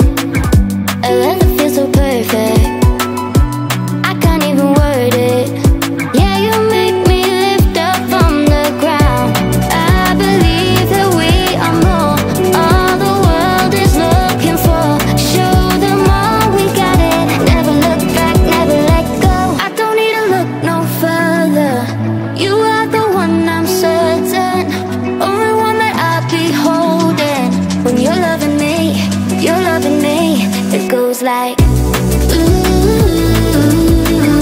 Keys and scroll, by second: 0.0 BackSpace, 28.6-29.7 typing, 33.8 Up.